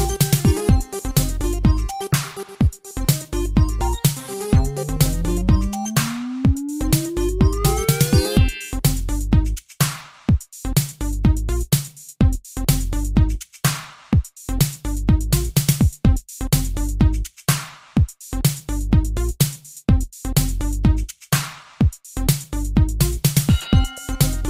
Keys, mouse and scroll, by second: 0.9 g, 1.9 click, 3.1 click, 3.3 click, 3.7 shift+space, 5.3 Escape, 5.7 space, 6.1 Escape, 7.2 g, 7.9 click, 8.5 shift+space, 10.5 Escape, 11.6 click, 21.7 click, 21.8 click, 22.6 3, 24.0 r.